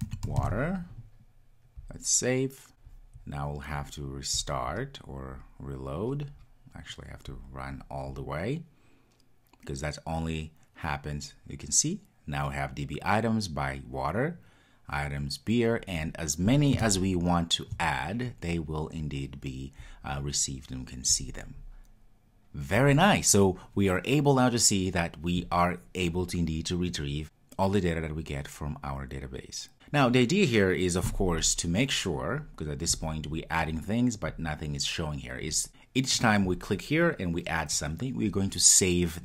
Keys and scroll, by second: 4.4 super+\, 4.5 super+\, 7.3 ctrl+r.